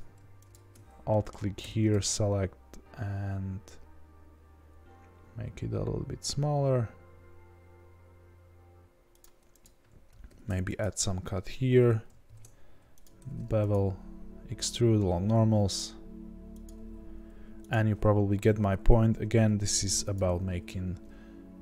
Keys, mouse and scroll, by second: 1.1 middle click, 1.6 s, 9.6 click, 10.2 ctrl+r, 12.2 ctrl+b, 13.7 alt+e, 17.2 3, 17.7 click, 19.1 i.